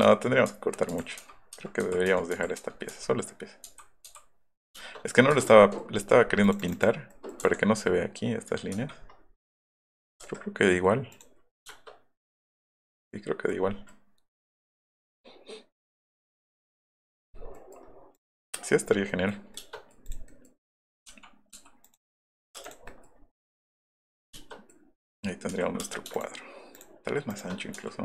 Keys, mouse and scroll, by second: 0.0 ctrl+z, 0.5 ctrl+z, 0.6 ctrl+z, 0.9 ctrl+z, 1.5 ctrl+z, 1.8 ctrl+z, 2.1 ctrl+z, 4.8 shift+middle click, 5.3 middle click, 5.3 Escape, 5.8 middle click, 6.5 click, 6.6 click, 6.8 click, 7.4 Escape, 8.8 Escape, 10.1 scroll up 2, 10.3 Escape, 11.1 click, 11.6 shift+middle click, 12.5 middle click, 13.5 middle click, 16.9-17.7 scroll up 4, 18.1 click, 18.4-18.7 scroll up 2, 19.1-19.9 scroll up 2, 20.0 click, 20.3 middle click, 20.6 click, 21.1 m, 21.6 ,, 21.9 click, 22.4 click, 22.6 space, 22.7 drag, 22.9 middle click, 25.2 click, 25.5 s, 25.8 space, 26.2 shift+click, 27.8 s.